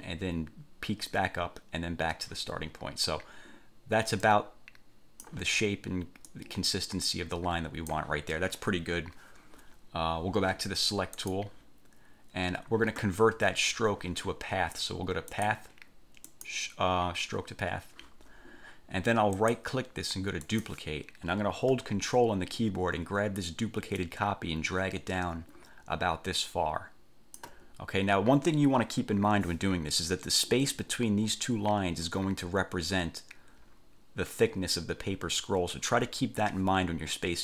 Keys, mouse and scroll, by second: 4.4 click, 6.4-8.2 drag, 11.3 click, 15.6 click, 16.5 click, 19.6 right click, 20.6 click, 24.2-27.8 ctrl+drag.